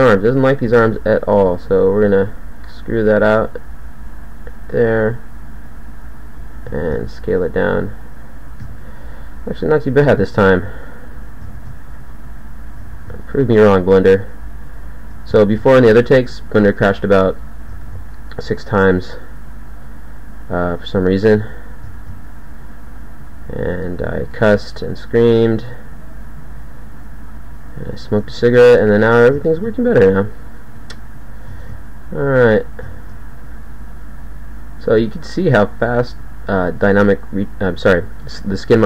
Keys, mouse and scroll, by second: 0.9 middle click, 2.6 e, 5.8 e, 6.8 ctrl+a, 8.6 KP_1, 10.0 e, 11.6 ctrl+a, 13.0 ctrl+a, 14.0 g, 16.6 e, 17.8 ctrl+a, 18.9 g, 21.2 e, 22.0 ctrl+a, 23.6 g, 24.6 g, 26.3 g, 28.3 e, 29.6 ctrl+a, 30.8 g, 31.6 ctrl+a, 33.0 ctrl+a, 33.8 g, 35.2 g, 36.4 g.